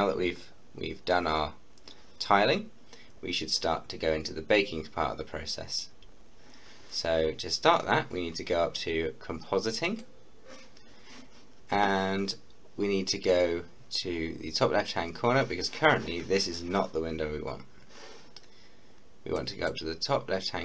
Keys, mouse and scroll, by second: 0.4-1.7 scroll up 1, 9.8 scroll up 1, 9.9 click, 19.3-20.6 drag.